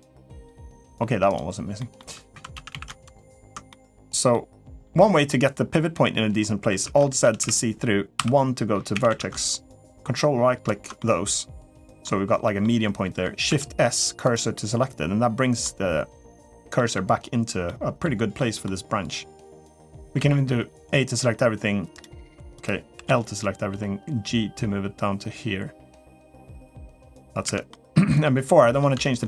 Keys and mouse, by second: 0.2 click, 0.7 g, 1.6 middle click, 2.1 2, 2.3 a, 2.5 a, 2.9 alt+shift+click, 3.5 middle click, 4.1 middle click, 4.8 middle click, 5.5 middle click, 6.6 alt+z, 7.0-8.9 typing, 9.7 ctrl+right click, 10.8-11.8 middle drag, 12.2 middle click, 13.3 shift+s, 14.6 middle click, 16.6 middle click, 17.4 middle click, 18.2 middle click, 20.0 a, 20.9 g, 22.7 l, 23.5 g, 26.4 middle click, 27.2 Tab, 27.5 middle click, 28.4 middle click, 28.8 shift+middle click.